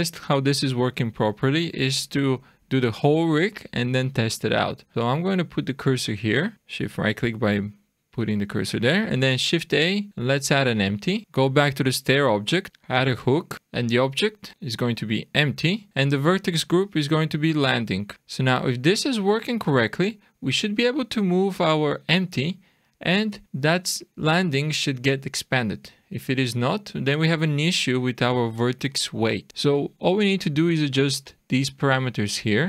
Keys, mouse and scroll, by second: 1.4-1.8 scroll up 2, 6.4 shift+right click, 9.5 shift+a, 11.2 click, 13.3 click, 13.5 scroll down 4, 13.7 click, 15.9 click, 19.4 click, 20.5 click, 26.4 click, 30.5 click.